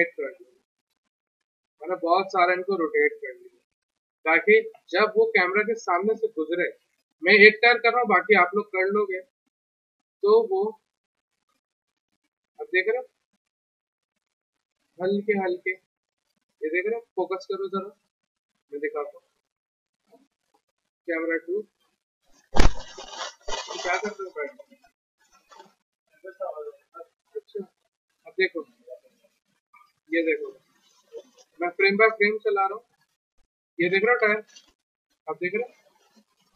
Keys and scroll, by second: 3.7 w, 19.8 c, 22.6 f.